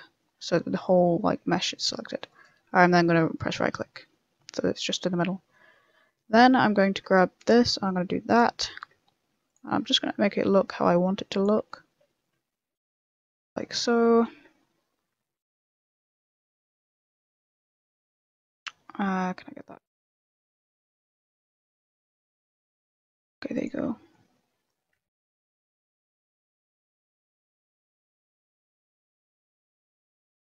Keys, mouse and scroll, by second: 2.6 middle click, 3.5 middle click, 3.9 middle click, 4.4 middle click, 5.1 middle click, 5.7 a, 6.1 middle click, 6.8 ctrl+r, 8.4 a, 8.7 ctrl+r, 11.5 a, 11.6 middle click, 12.0 shift+middle click, 12.3 middle click, 12.9 ctrl+r, 13.7 middle click, 14.2 ctrl+r, 16.4 a, 16.6 ctrl+r, 21.1 ctrl+z, 21.3 middle click, 22.1 ctrl+r, 23.7 a, 23.8 middle click, 24.9 ctrl+z, 25.1 ctrl+z, 25.4 scroll up 2, 25.9 middle click, 26.3 ctrl+r, 28.2 a, 28.4 ctrl+r, 29.3 a, 29.5 ctrl+r.